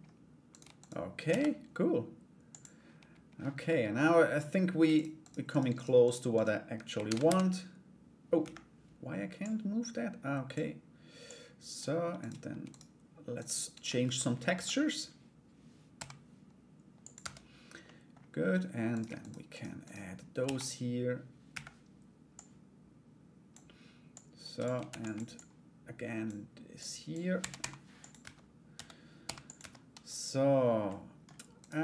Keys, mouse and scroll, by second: 0.1 right click, 0.3 shift+right click, 0.9 shift+d, 4.5 shift+right click, 4.8 shift+right click, 5.1 shift+right click, 5.3 shift+right click, 5.6 shift+right click, 5.9 shift+right click, 6.6 shift+d, 8.9-10.1 drag, 10.8 click, 11.7 right click, 12.3 shift+right click, 12.9 shift+right click, 13.3 shift+right click, 13.6 Tab, 14.1 a, 15.5 g, 16.8 Tab, 17.4 middle click, 18.5 right click, 18.8 right click, 19.1 right click, 19.4 right click, 20.0 shift+d, 22.0-23.1 drag, 23.7 click, 24.5 shift+d, 24.9 click, 26.3 click, 26.9 r, 27.8 Tab, 28.3 a, 28.8 g, 29.2 Tab, 30.4 middle click, 31.2 right click.